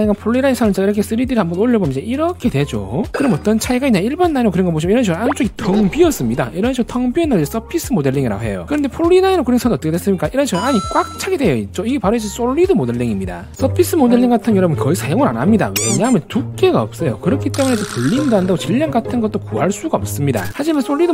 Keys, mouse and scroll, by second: 1.1 click, 1.5 click, 1.8 right click, 2.5 middle click, 2.9 click, 4.9 click, 5.3 scroll down 2, 5.6 shift+middle click, 6.4 middle click, 10.2 middle click, 11.2 click, 11.6 shift+middle click, 13.9 click, 14.8 click.